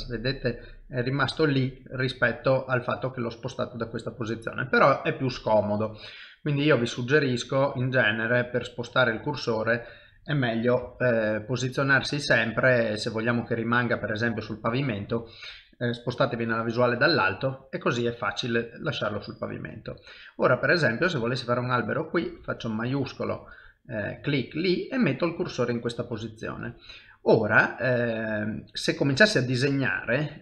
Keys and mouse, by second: 1.8 middle click, 6.7 click, 8.8 middle click, 10.8 shift+s, 16.2 KP_7, 17.1 shift+middle click, 22.2 shift+right click, 24.4 middle click, 25.6 ctrl+middle click, 26.3 shift+middle click, 26.8 middle click, 29.7 click.